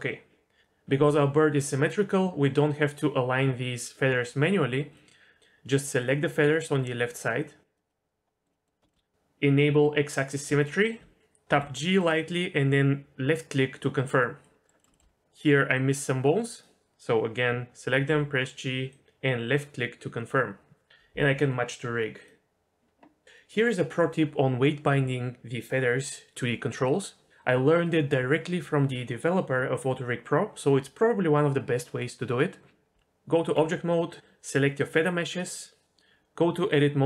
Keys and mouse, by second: 5.0 middle click, 7.9 middle click, 8.5 middle click, 8.9 shift+middle click, 10.6 shift+middle click, 11.5 g, 14.4 middle click, 14.8 middle click, 14.9 shift+middle click, 15.7 click, 18.1 g, 22.2 click, 32.9 Tab, 35.8 Tab, 36.8-37.0 drag.